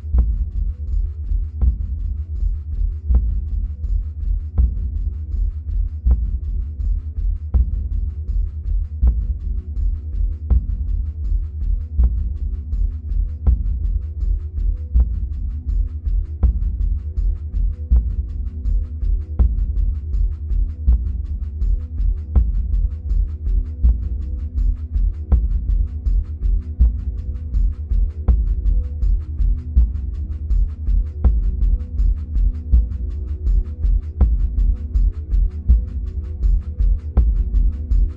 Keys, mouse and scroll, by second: 1.1-4.4 middle drag, 4.4-12.8 drag, 12.8-15.7 middle drag, 14.3-15.7 scroll up 2, 15.7 drag, 20.2-24.3 middle drag, 21.3 scroll down 1, 24.3 click, 27.6-29.7 middle drag, 29.7 click, 33.3-35.1 middle drag, 35.1 click.